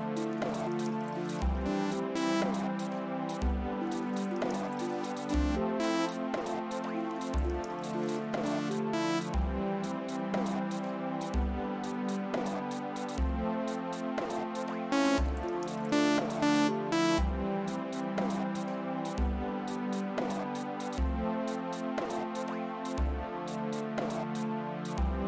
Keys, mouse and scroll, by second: 0.1 space, 2.5 space, 3.7 space, 6.2 space, 9.3 space, 11.9 click, 12.9 click, 14.0 click, 14.8 space, 17.2 space, 18.4 click, 20.1 click, 21.6-22.8 drag.